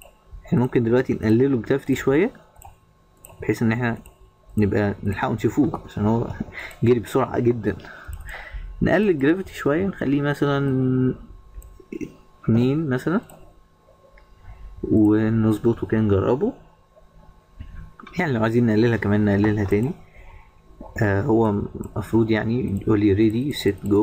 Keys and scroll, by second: 6.1 Escape.